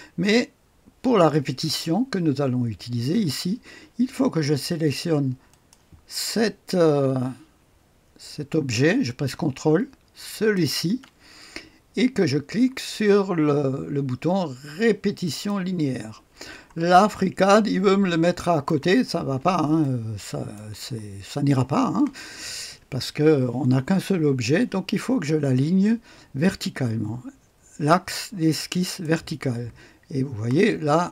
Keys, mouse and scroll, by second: 5.4 click, 10.1 ctrl+click, 15.2 click, 16.8-17.4 scroll down 1, 17.4-19.1 drag, 19.7-20.8 drag, 25.4-29.0 drag, 30.5 click.